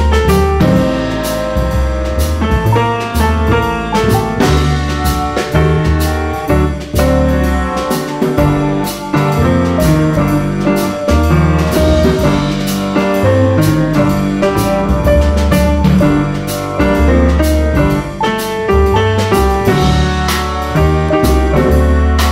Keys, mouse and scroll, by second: 0.0 click, 0.4 click, 1.2-2.2 drag, 2.3 click, 2.8-3.8 drag, 4.4 click, 5.1 click, 5.8 click, 6.1-6.4 scroll down 1, 6.4-6.8 scroll up 1, 6.8 click, 7.6 click, 8.4 click, 8.6-9.0 scroll down 1, 9.4-10.4 drag, 10.8 click, 11.2-11.5 scroll up 1, 11.9-12.4 drag, 12.6-13.0 scroll up 1, 13.6 click, 14.9 click, 16.6 click, 17.1 drag, 17.5 click, 18.3 click, 18.7-19.1 scroll down 1, 19.9 click, 21.3 click.